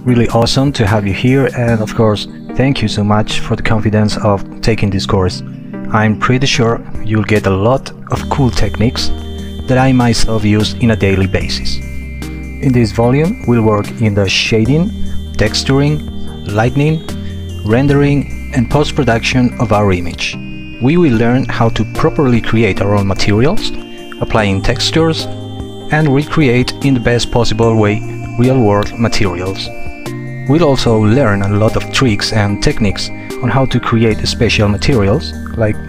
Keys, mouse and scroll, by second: 0.8 shift+click, 1.0 shift+click, 1.0 shift+double click, 1.8 shift+click, 2.0 shift+click, 2.0 shift+double click, 2.6 alt+click, 4.0 alt+click, 6.9 m, 9.0-12.0 typing, 12.4 alt+click, 13.2 alt+click, 14.2 alt+shift+click, 14.9 alt+click, 26.0-26.7 typing, 29.0 alt+click, 29.8-32.0 typing, 29.9 alt+click, 34.7 1, 34.8 Return.